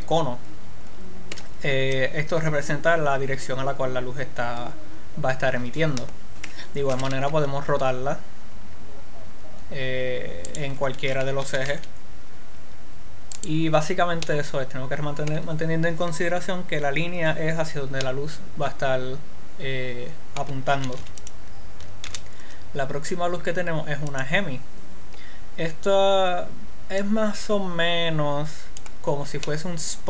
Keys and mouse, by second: 0.3-2.3 middle drag, 7.3 r, 11.5-12.5 drag, 11.9 r, 14.0-16.0 drag, 18.8-20.3 middle drag, 21.4 x, 22.6 shift+a, 24.7 click, 27.5-29.5 drag.